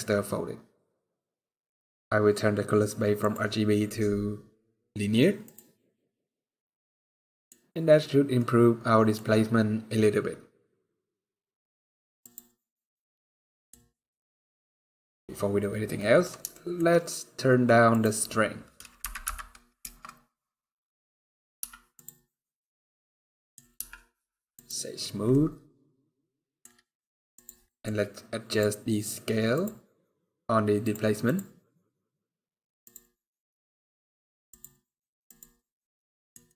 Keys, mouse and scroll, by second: 0.9-1.3 scroll down 3, 2.9 click, 6.5-7.1 scroll down 5, 6.9 middle click, 7.2 scroll up 1, 8.0 scroll down 1, 8.1 middle click, 9.1 scroll up 1, 11.9 click, 12.6 scroll down 2, 12.7 middle click, 13.7 scroll up 1, 15.7 middle click, 16.2 shift+middle click, 16.7 scroll up 1, 17.6 click, 21.3 z, 22.3 middle click, 23.5 z, 25.0 middle click, 27.1 click, 27.4 middle click, 28.2 click, 31.6 scroll down 1, 32.6 click, 32.6-33.0 scroll down 5, 34.2 click, 34.2 scroll down 1, 35.8 middle click, 36.2 middle click.